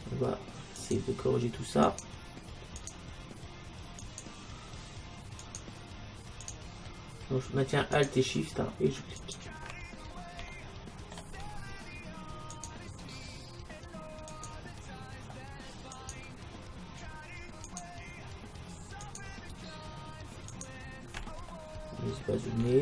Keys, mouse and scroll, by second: 10.0-12.4 middle drag, 12.6-21.3 right drag, 21.3-22.8 middle drag.